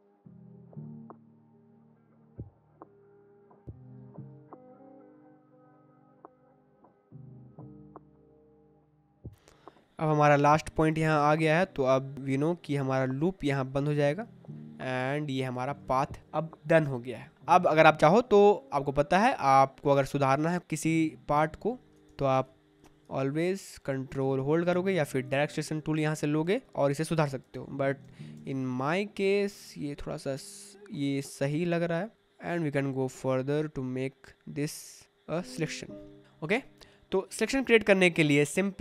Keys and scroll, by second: 1.4 space, 2.1 space, 3.6 space, 4.8 space, 5.7 ctrl+z, 6.5 space, 7.4 space, 9.0 space, 15.0 space, 22.0 space, 24.1 space, 26.6 space, 37.6 space.